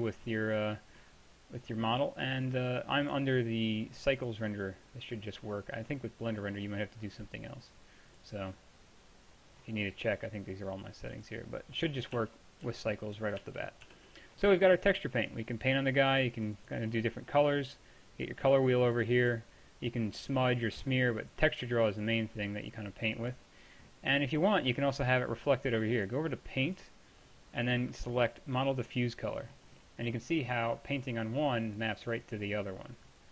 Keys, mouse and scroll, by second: 2.4-6.1 drag, 6.1-8.2 middle drag, 8.2-10.0 drag, 10.0-11.2 middle drag, 12.2-13.9 typing, 12.9 click, 13.2 middle click, 18.7-19.3 drag, 22.8-27.8 drag, 29.5-30.9 middle drag, 31.0-33.3 middle drag.